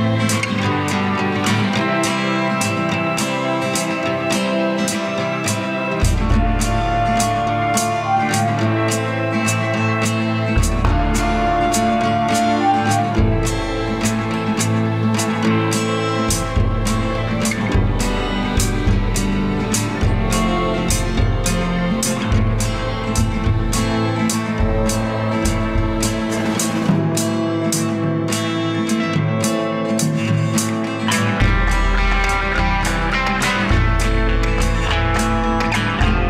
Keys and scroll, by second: 2.0 ctrl+0, 14.5 ctrl+=, 14.8 space, 19.0 ctrl+=, 19.4 space, 22.8 ctrl+z, 28.0 Delete, 31.2 Down, 31.8 ctrl+z, 32.6 Down, 32.8 Left, 33.1 Down, 33.3 Left, 33.5 Down, 35.3 Down, 35.4 Left, 35.6 Down.